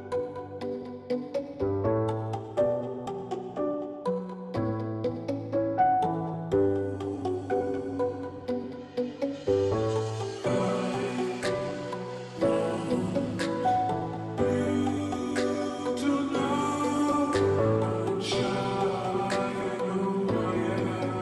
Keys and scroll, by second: 0.0-21.2 typing, 16.4 Left, 18.6 ctrl+j.